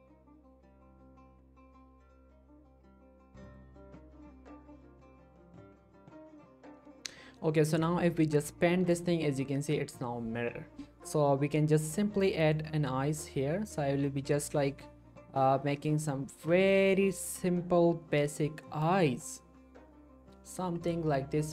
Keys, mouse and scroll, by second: 2.0-3.4 scroll down 1, 3.4 click, 7.8-9.1 drag, 9.5 ctrl+z, 12.5-16.3 drag, 16.5 ctrl+z, 16.7-20.7 drag, 21.1 scroll down 1.